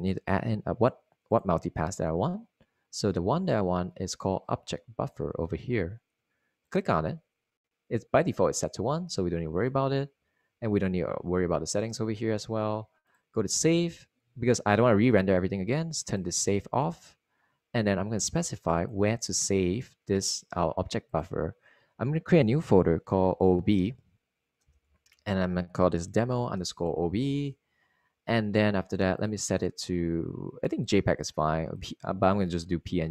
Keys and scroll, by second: 26.2-27.1 typing, 28.0 Return, 28.9-30.8 typing, 30.9 Return.